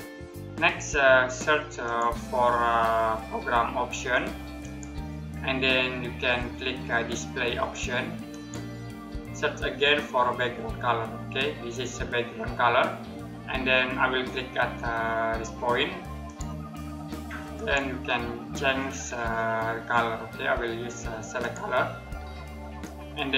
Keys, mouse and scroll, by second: 1.5 click, 4.3 click, 6.0-7.9 scroll down 1, 7.9 click, 9.7-10.7 scroll down 1, 15.9 click, 18.1-20.2 scroll down 1, 21.0 click.